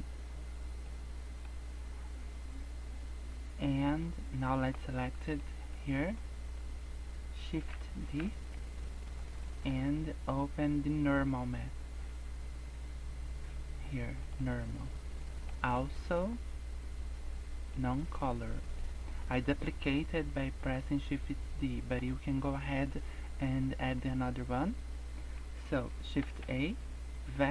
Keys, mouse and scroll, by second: 0.6 scroll down 3, 0.8 middle click, 1.7 scroll down 2, 2.0 scroll up 2, 3.9 click, 4.7 scroll down 4, 5.2 middle click, 5.6 scroll up 2, 6.1 click, 6.8 scroll down 2, 7.1 scroll up 1, 8.1 shift+d, 9.4 shift+middle click, 9.8-10.5 scroll up 9, 11.1 click, 15.0 scroll down 1, 15.2 middle click, 16.1 click, 18.1 scroll down 4, 18.5 middle click, 19.2 click, 20.4 scroll down 2, 20.6 middle click, 20.9-21.2 scroll up 3, 21.7 middle click, 23.8-24.4 scroll up 4, 26.3 shift+a.